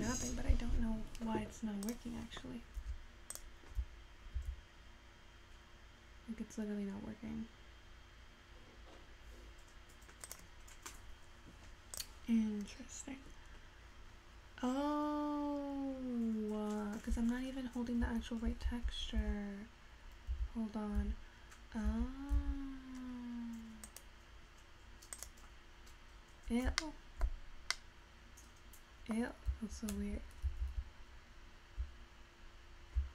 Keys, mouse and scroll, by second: 25.3 right click, 27.0-33.1 middle drag.